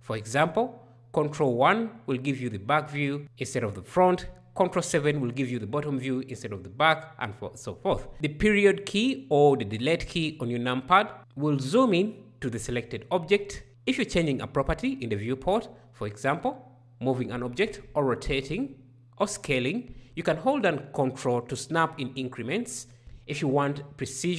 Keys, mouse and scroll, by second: 8.1 KP_Decimal.